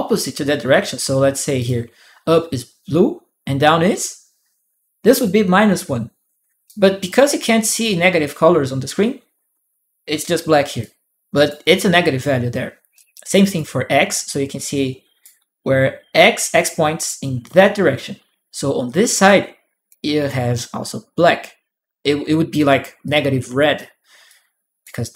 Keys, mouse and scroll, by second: 0.0-1.4 right drag, 0.5 click, 6.4 right click, 6.9 click, 10.6-11.7 drag, 10.7 right click, 12.7 click, 12.7 right click, 13.9-18.5 drag, 14.3 right click, 19.0 click, 19.0-20.0 right drag, 22.3 right click, 22.8 click, 23.3 right click, 23.5 right click, 24.0 click, 24.0 right click.